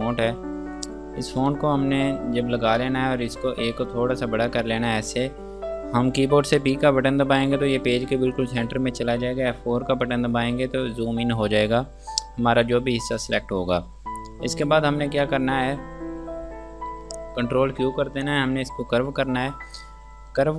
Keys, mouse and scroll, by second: 0.1 F2, 0.5 click, 2.8 scroll down 1, 4.1 shift+click, 7.1 p, 10.2 F4, 14.3 scroll down 1, 18.8 q.